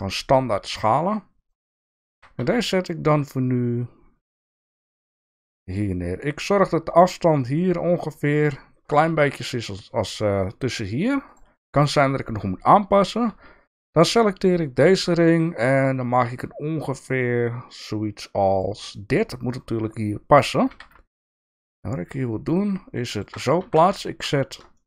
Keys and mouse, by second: 2.1 g, 8.8 click, 9.2 shift+middle click, 13.3 shift+d, 14.0 s, 18.9 shift+middle click, 20.7 g, 23.6 alt+z, 24.0 shift+middle click, 24.7 shift+middle click.